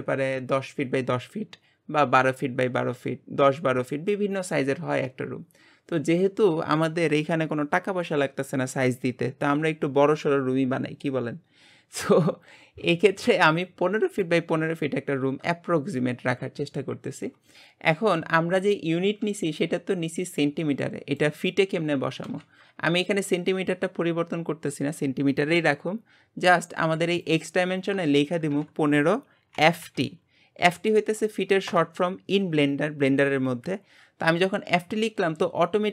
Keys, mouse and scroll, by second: 27.2 click.